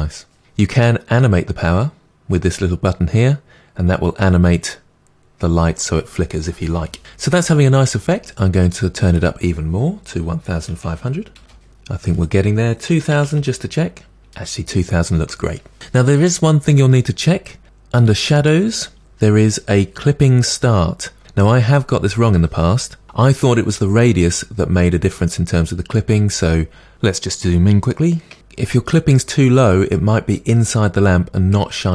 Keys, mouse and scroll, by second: 11.4 0, 26.5-28.4 scroll up 6, 28.4-31.9 drag.